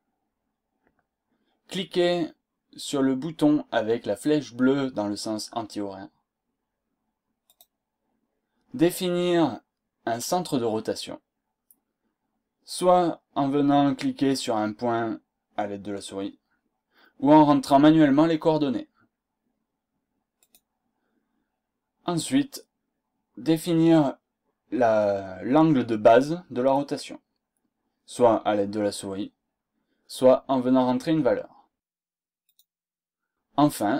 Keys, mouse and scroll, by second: 20.4 click, 32.4 click.